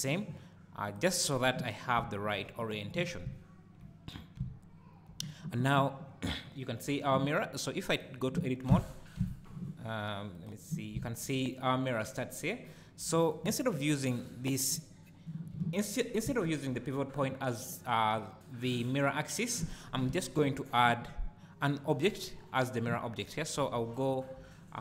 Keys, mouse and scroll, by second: 1.2 click, 1.9 `, 3.1 scroll up 1, 3.2 `, 3.9 scroll down 1, 4.3 `, 7.9 click, 8.7 Tab, 9.1 `, 10.3 click, 10.9 `, 16.4 `, 20.1 Tab, 23.6 KP_7.